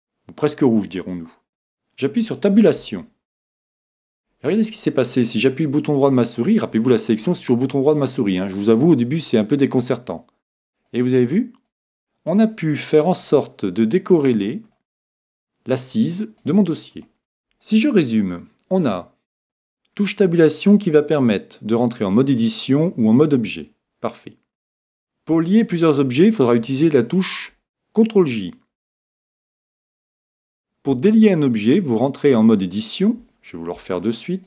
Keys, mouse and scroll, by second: 2.8 Tab, 4.7 right click, 5.4-7.3 middle drag, 10.8-16.0 right drag, 14.8-16.5 middle drag, 16.5 right click.